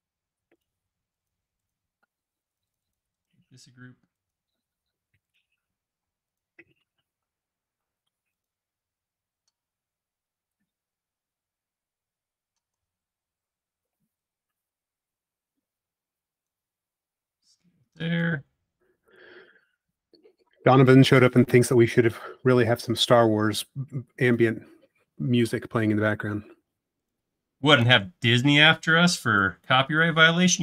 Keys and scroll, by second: 6.0 m, 12.8 s, 20.7 space, 28.5 BackSpace, 29.0 e.